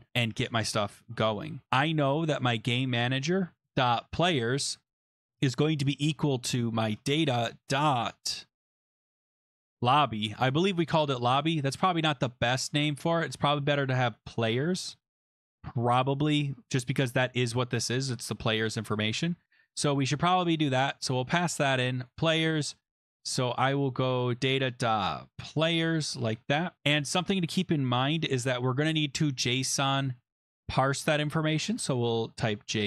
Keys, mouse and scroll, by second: 2.0-7.6 typing, 4.9 Tab, 9.0-10.0 typing, 11.2 click, 11.5 click, 12.1 click, 13.6 click, 13.7 click, 14.3-15.6 typing, 15.6 click, 15.7 ctrl+s, 17.2 click, 17.8 click, 17.9 click, 19.1 click, 21.0 click, 22.1 click, 24.3 click, 24.4 click, 25.1-26.3 typing, 27.1 click, 28.0 Left, 28.0 BackSpace, 29.8 click, 31.6-32.8 typing.